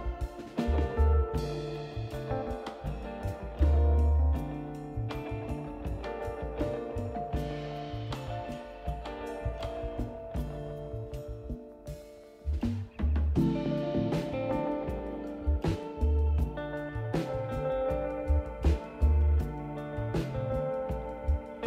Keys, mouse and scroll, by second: 0.3 scroll up 2, 1.4 scroll up 2, 4.9 click, 6.5 click, 8.4 right click, 14.0 click, 16.4-16.8 scroll up 3, 16.8 scroll down 2, 17.4 click, 19.0 click, 20.3 right click.